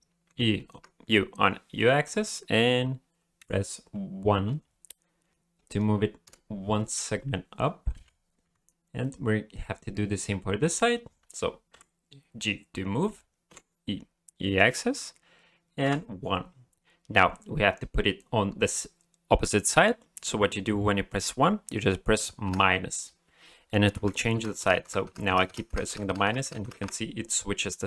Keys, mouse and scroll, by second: 7.9 alt+a, 8.4 b, 11.7 g.